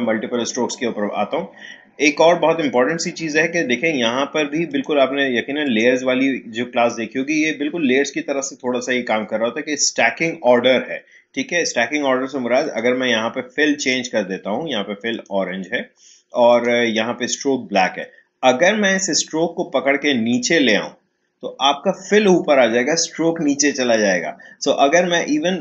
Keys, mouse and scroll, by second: 4.7 click, 12.6 click, 19.1-23.0 drag.